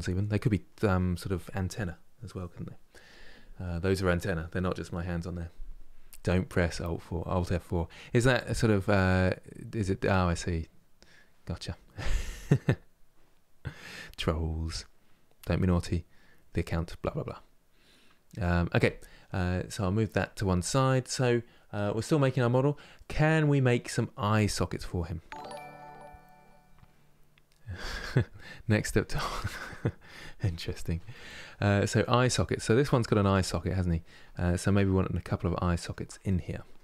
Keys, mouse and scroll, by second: 22.7-32.2 middle drag, 32.2-32.6 scroll down 1, 32.6-34.7 shift+middle drag, 34.7-35.3 scroll up 2, 35.3-36.8 shift+middle drag.